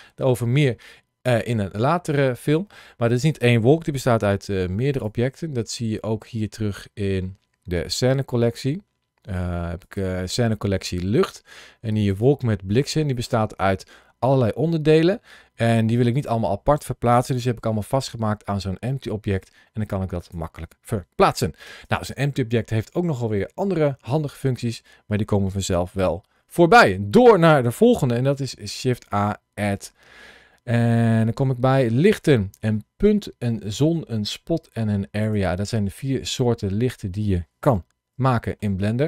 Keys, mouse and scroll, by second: 24.6 scroll down 1, 25.8 shift+middle click, 26.6 middle click, 27.8 shift+a, 35.0 click, 35.6 scroll down 1, 36.0 middle click, 37.7-38.1 scroll up 2, 38.2 shift+middle click, 38.8 middle click.